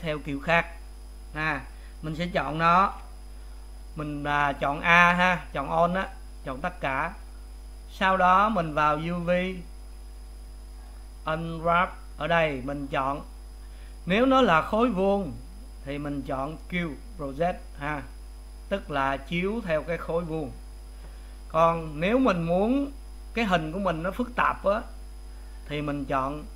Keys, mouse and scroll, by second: 0.6 click, 3.1 a, 4.5-26.5 middle drag.